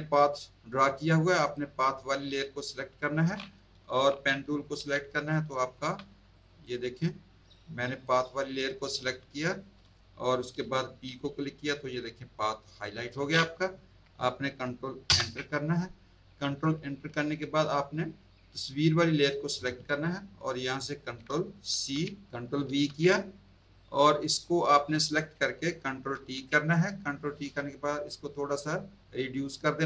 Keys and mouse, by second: 1.4 click, 4.8 p, 5.7 z, 6.3 click, 7.9 click, 9.0 space, 9.1 click, 11.0 p, 15.1 ctrl+Return, 19.2 click, 21.7 ctrl+c, 22.6 ctrl+v, 23.7 click, 26.1 ctrl+t, 28.2 shift+click.